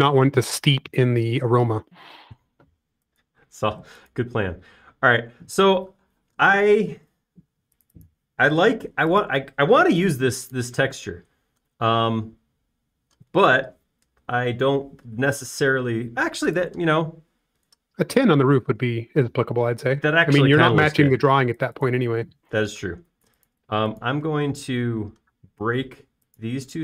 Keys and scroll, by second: 8.6 super+z, 9.1 space, 10.3 typing, 12.5 typing, 16.3 space, 24.3 l, 26.0-26.6 typing.